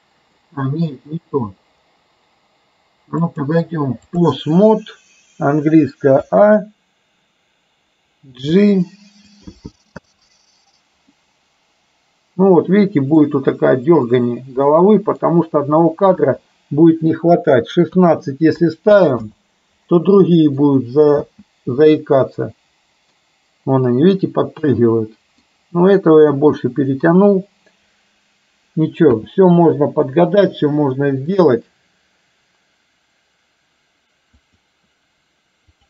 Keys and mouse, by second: 3.5-4.3 drag, 6.3 a, 8.4 g, 10.0 space, 11.2-13.3 middle drag, 14.9 middle click, 16.3 space, 17.4-19.4 drag, 20.4 middle click, 21.2 space, 22.0-23.3 middle drag, 24.8-25.5 middle drag, 29.3 space, 29.8-30.2 middle drag, 31.3-35.8 drag.